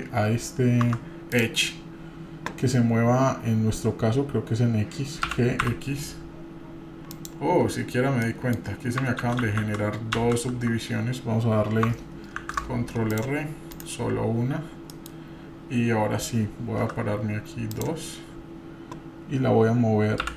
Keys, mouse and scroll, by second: 1.3 click, 7.7-8.3 scroll up 1, 8.3 middle click, 9.2 ctrl+z, 10.7 ctrl+z, 12.3 ctrl+r, 14.4 scroll down 2, 14.9 middle click, 16.8 2, 17.7 click, 20.2 3.